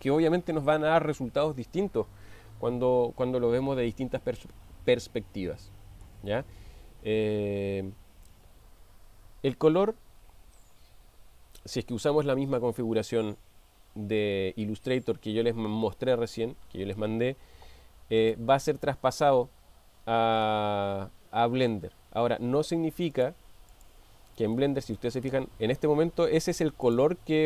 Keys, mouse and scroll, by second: 20.4-21.8 middle drag, 23.2 click, 23.7 click, 24.6-25.2 middle drag.